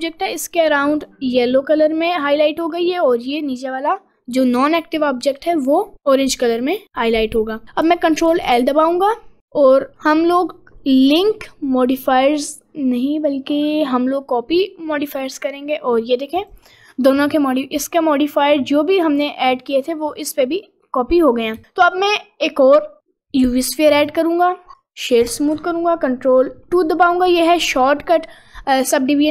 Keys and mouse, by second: 6.1 middle click, 6.7 middle click, 8.3 ctrl+l, 15.8 middle click, 16.5 click, 17.1 middle click, 17.4 middle click, 17.9 click, 20.2 click, 21.6 shift+a, 24.8 right click, 25.5 F24.